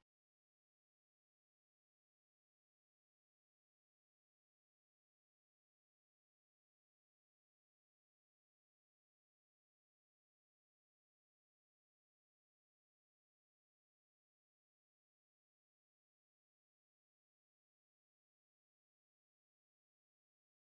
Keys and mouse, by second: 0.3-2.1 middle drag, 2.8-4.6 drag, 4.8 middle click, 5.3 click, 6.2-8.4 middle drag, 10.4 middle click, 11.7-12.8 drag, 12.8 middle click, 15.2-17.7 drag, 16.3 r, 18.0 ctrl+z, 19.4 click.